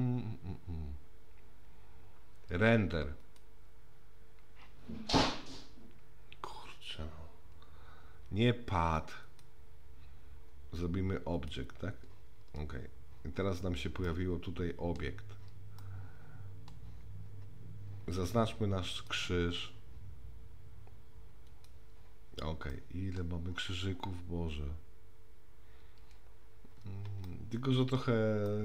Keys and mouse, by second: 3.3 click, 9.2-11.5 drag, 14.1 middle click, 15.8-16.7 middle drag, 19.1 click, 22.7-23.2 middle drag, 27.3-28.0 shift+middle drag, 28.5-28.6 shift+middle drag.